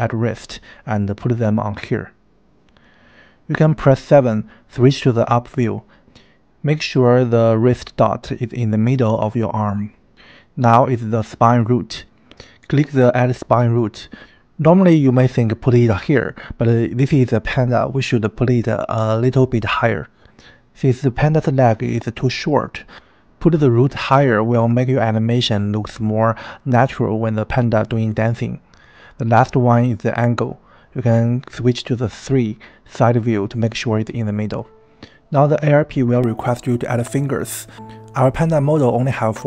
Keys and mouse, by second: 0.3 click, 2.4 click, 3.5 KP_7, 5.5 g, 8.0 KP_1, 8.5 g, 8.9 n, 12.9-13.4 drag, 22.2 click, 25.8-26.2 drag, 29.7 click, 31.4 KP_3, 33.8 KP_1, 38.9 KP_7.